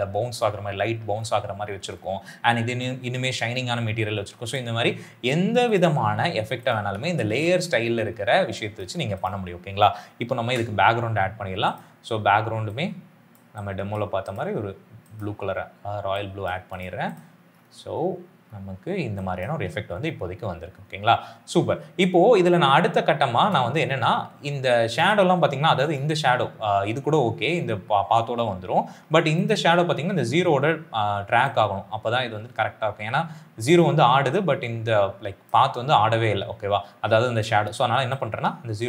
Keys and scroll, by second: 6.9 s, 7.1 s, 8.2 space, 10.2 ctrl+y, 19.4 space, 23.3 space.